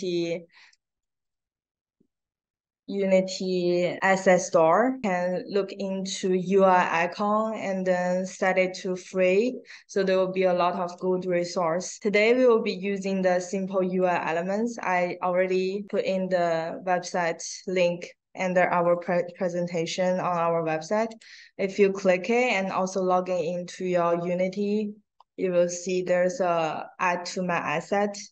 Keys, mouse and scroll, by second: 1.2 click, 5.1 click, 11.2 click, 13.9 click, 15.2 click, 16.9 click, 18.7 click, 21.0 click, 21.9 scroll down 1, 22.1 click, 26.1 scroll up 1.